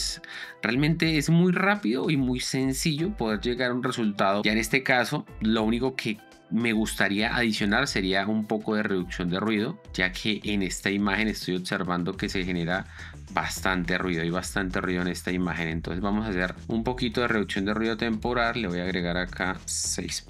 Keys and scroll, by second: 2.0 space, 6.1 space, 7.1 Escape.